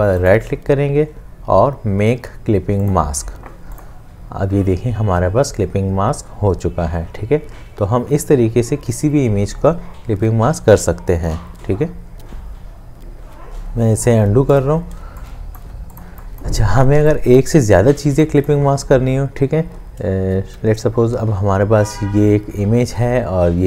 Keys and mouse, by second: 0.3 right click, 13.2 ctrl+z, 15.0 space.